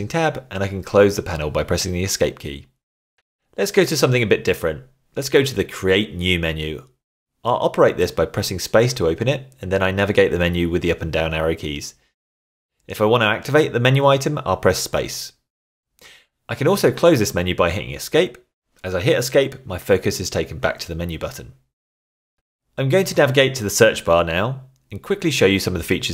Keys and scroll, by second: 1.1 Tab, 2.3 Tab, 4.5 Escape, 7.1 shift+Tab, 9.6 space, 11.3 Down, 13.0 Up, 18.2 Escape, 24.9 shift+Tab.